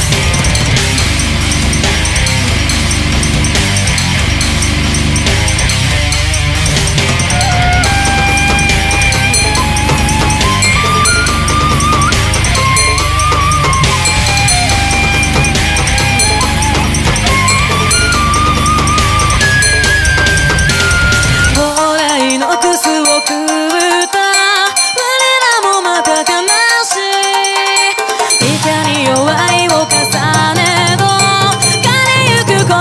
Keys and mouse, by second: 0.2 ctrl+z, 0.8 ctrl+z, 1.0 ctrl+z, 4.2 ctrl+z, 5.2 ctrl+z, 5.9 ctrl+z, 6.4 ctrl+z, 7.0 ctrl+z, 7.5 ctrl+z, 7.9 ctrl+z, 8.1 ctrl+z, 10.5 ctrl+z, 10.8 ctrl+z, 12.6 ctrl+z, 14.8 ctrl+z, 15.6 ctrl+z, 16.9 space, 18.4 ctrl+z, 19.8 ctrl+z, 20.0 ctrl+z, 21.2 ctrl+z, 21.5 ctrl+z, 22.0 ctrl+z, 22.4 ctrl+z, 23.4 ctrl+z, 24.5 ctrl+z, 25.0 ctrl+z, 25.2 ctrl+z, 26.1 ctrl+z, 27.1 ctrl+z, 28.2 ctrl+z, 28.6 ctrl+z, 28.9 ctrl+z.